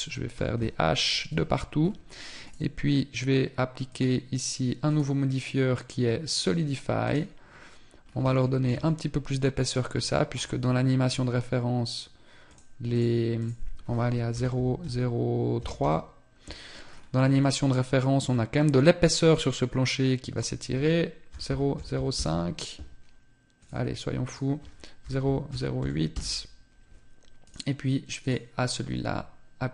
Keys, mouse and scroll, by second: 0.5 right click, 0.7 h, 1.3 scroll up 2, 1.9 right click, 1.9 scroll up 1, 3.3 click, 7.5-7.8 scroll up 2, 7.9 shift+middle click, 8.3 middle click, 9.4 scroll up 3, 10.7 scroll up 4, 11.9 click, 16.4-17.1 scroll down 3, 16.9 middle click, 19.8 click, 23.1 click, 26.9 right click, 27.7 click.